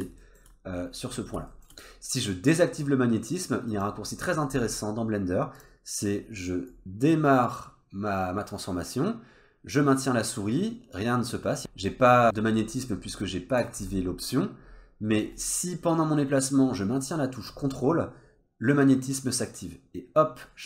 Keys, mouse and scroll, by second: 0.2 shift+middle click, 0.6-1.1 scroll up 1, 1.1 scroll down 1, 1.5 shift+middle click, 3.7 click, 4.5-5.6 scroll up 3, 5.6 click, 6.7 click, 15.3 click.